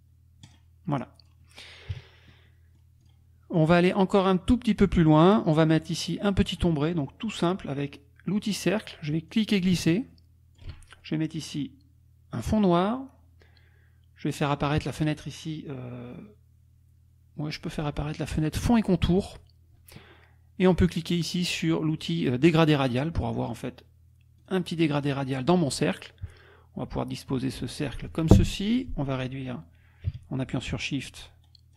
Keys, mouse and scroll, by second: 0.4 click, 1.2 click, 1.9 KP_Subtract, 2.5 click, 3.1 click, 3.6 click, 5.1 click, 6.5 click, 8.4 click, 9.3-10.8 drag, 12.3 click, 18.3 click, 22.5 click, 24.5 click, 26.0-28.4 drag, 28.9-31.5 drag, 31.5-31.7 shift+scroll down 1.